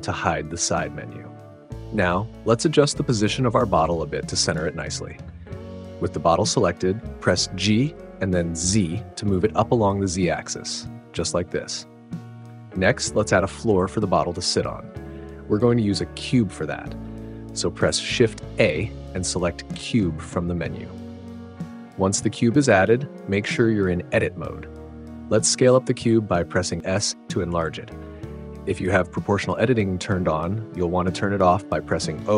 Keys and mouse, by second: 1.9 click, 5.5 click, 5.8 middle click, 6.0-8.0 right drag, 8.0 g, 8.4 z, 12.0 right click, 15.1 middle click, 15.7 middle click, 18.0 shift+a, 22.7 Tab, 24.9 s, 29.5 click.